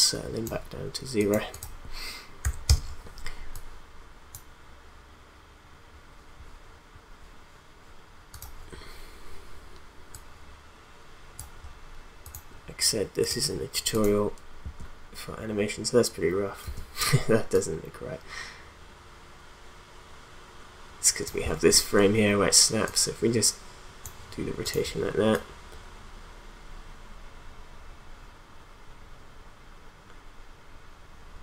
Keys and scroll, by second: 2.4 0, 2.7 Return, 14.6 space, 16.6 space.